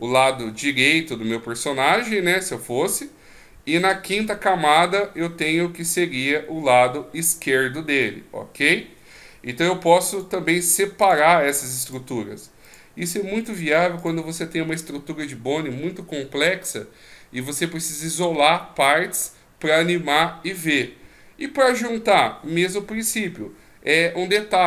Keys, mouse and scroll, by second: 3.8 click, 10.1 click, 11.8 click, 12.6 click, 13.4 click, 14.0 click.